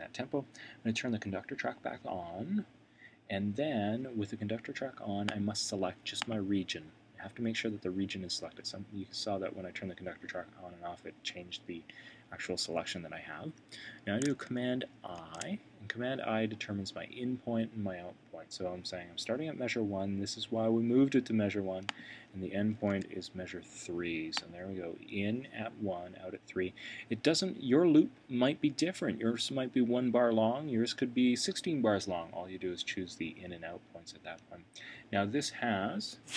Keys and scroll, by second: 15.2 super+i.